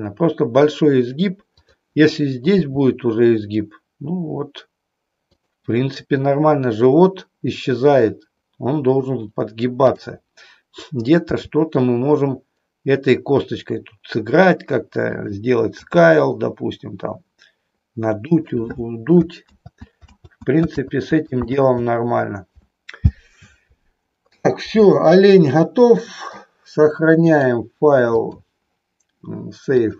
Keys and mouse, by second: 2.7 r, 5.4 click, 9.8 click, 11.3 g, 15.8 s, 18.3 click, 19.4 ctrl+z, 21.6 ctrl+z, 25.1-26.1 shift+middle drag, 27.2 click, 28.1-29.9 drag.